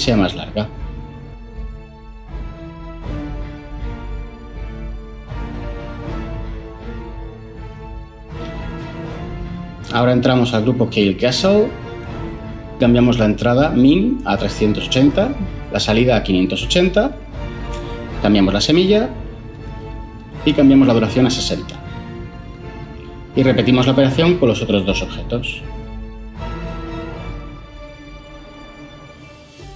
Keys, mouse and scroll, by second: 8.6 Tab, 9.7 Tab, 13.6 3, 14.5 8, 15.0 0, 17.6 5, 18.3 8, 18.8 0, 19.3 Return, 21.7-22.1 typing, 26.3-28.1 typing, 27.1 Tab, 28.8 Tab.